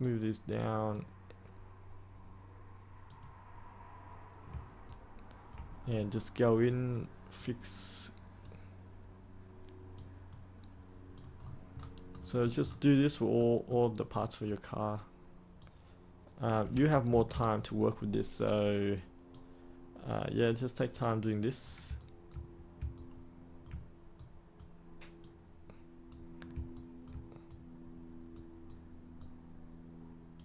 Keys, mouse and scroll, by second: 4.8 ctrl+right click, 5.8-7.3 scroll up 1, 7.3-8.5 drag, 11.3-12.0 scroll up 1, 12.0 middle click, 12.6-13.3 scroll up 1, 13.3 middle click, 14.1 right click, 15.5-16.6 drag, 17.0 ctrl+z, 17.6-20.7 drag, 20.9 right click, 21.9 ctrl+right click, 22.9 ctrl+right click, 24.1 right click, 25.1 click, 26.7 ctrl+right click, 27.4-29.8 right drag, 30.3-30.4 drag.